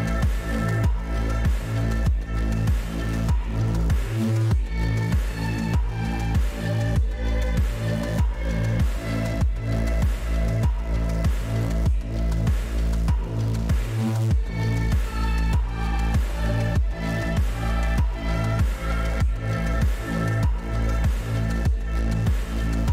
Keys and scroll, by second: 0.7 w, 2.1 w, 4.0 w, 5.1 w, 6.3 w, 9.3 w, 12.1 w, 13.7 w, 14.9 w, 15.5 w, 17.5 w, 19.7 F11, 21.0 Escape.